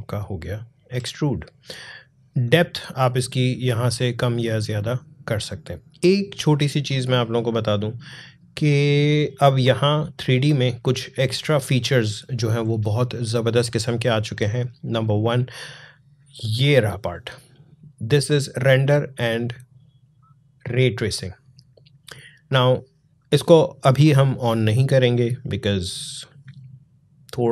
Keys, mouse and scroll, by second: 0.7-1.8 alt+scroll up 1, 2.5-5.0 drag, 6.6-11.0 drag.